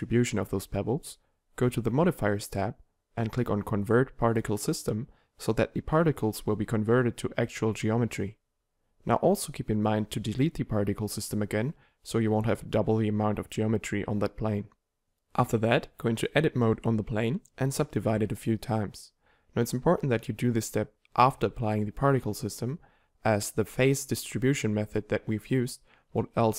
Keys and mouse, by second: 11.1-15.1 drag, 15.6 Tab, 16.0 w, 16.5 click, 16.6 w, 17.1 w, 17.5 w, 18.6 Tab, 20.0 t, 21.4-22.6 drag, 22.5 t.